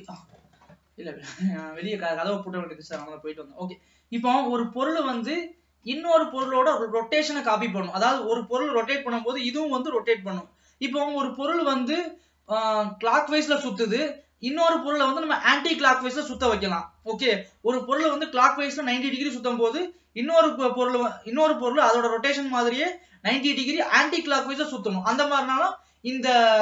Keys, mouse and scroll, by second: 0.8-2.4 scroll up 2.